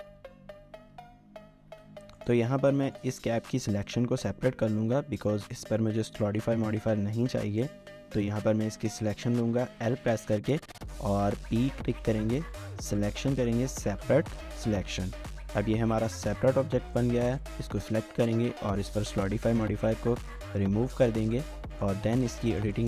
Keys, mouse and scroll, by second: 0.0-2.1 typing, 11.3-12.0 typing, 15.2 Tab, 16.0 typing, 21.1 scroll up 1, 21.4 shift+middle click, 22.0 Tab, 22.2 scroll up 1, 22.5 shift+middle click.